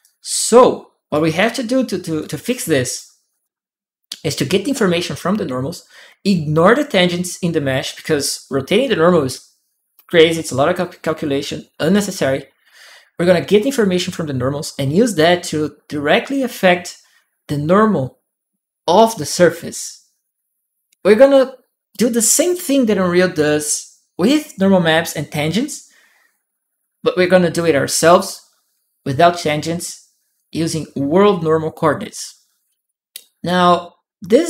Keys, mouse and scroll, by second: 0.9-2.7 drag, 2.0-3.2 right drag.